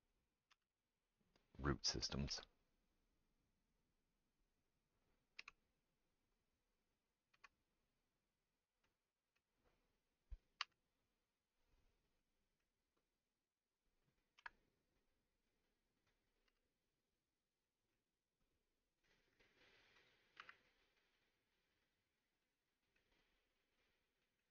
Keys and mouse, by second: 0.5 g, 2.3 s, 5.4 e, 7.3 s, 10.8 g, 13.0 click, 13.0 middle click, 14.9 2, 16.5 g, 17.4-19.5 middle drag, 18.5 click, 20.0 click, 20.0 middle click, 20.4 g.